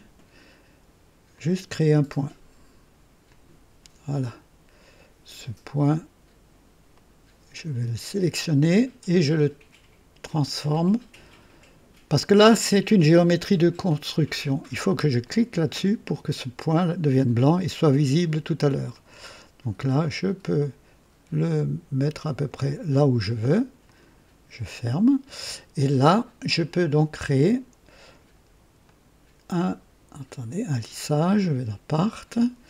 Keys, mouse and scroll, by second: 1.2 click, 3.2 click, 6.8 right click, 8.6 click, 15.1 click, 18.0 right click, 18.9 click, 20.0-22.5 drag, 23.8 click, 28.7 middle click, 28.8 click, 31.3 click.